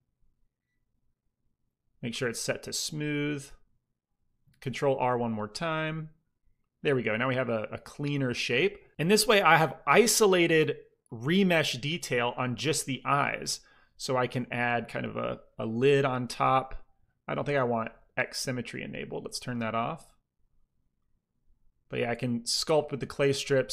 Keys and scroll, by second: 4.6 ctrl+r, 14.9 f, 19.1 ctrl+z, 19.6 ctrl+z.